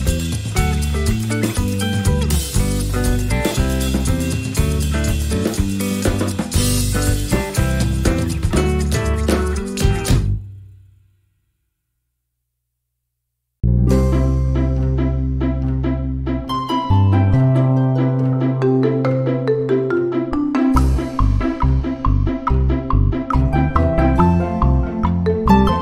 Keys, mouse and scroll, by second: 0.6-1.9 ctrl+shift+drag, 2.4-5.1 ctrl+shift+drag, 5.6 click, 6.3-11.5 drag, 12.4 click, 13.7 click, 14.6 click, 15.5 shift+click, 16.6 ctrl+-, 18.0 ctrl+click, 18.4 ctrl+d, 19.1 ctrl+shift+click, 20.0 ctrl+shift++, 21.9 d, 23.0 click, 24.3 click, 24.9 click.